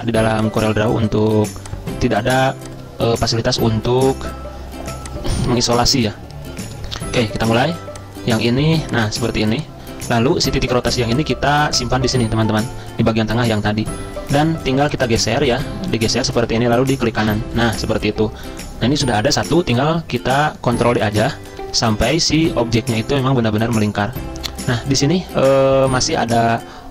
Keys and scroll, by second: 20.9 ctrl+d, 21.0 ctrl+d, 21.1 ctrl+d.